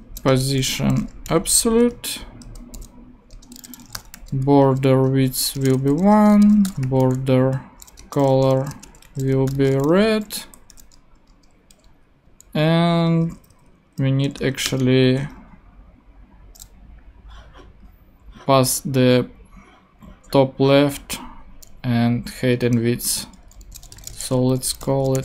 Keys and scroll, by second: 0.3 Return, 0.5-7.3 typing, 1.9 Return, 2.4 Right, 3.3 Return, 4.9 Return, 6.1 Return, 8.0 Return, 8.4-10.7 typing, 10.4 Right, 11.3 Return, 13.1 Up, 14.2 super+Up, 14.4 super+Right, 14.6 super+Return, 15.5 Return, 23.5-25.2 typing.